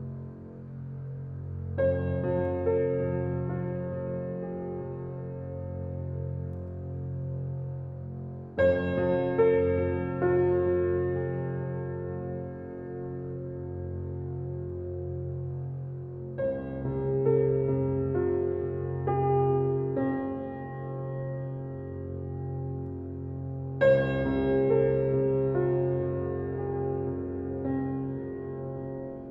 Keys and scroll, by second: 14.5 space.